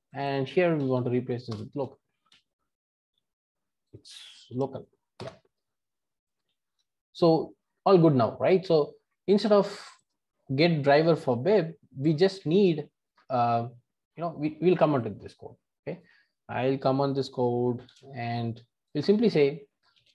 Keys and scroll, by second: 1.5 shift+Return, 5.2 Return, 6.7 super+BackSpace, 17.8 alt+shift+super+/.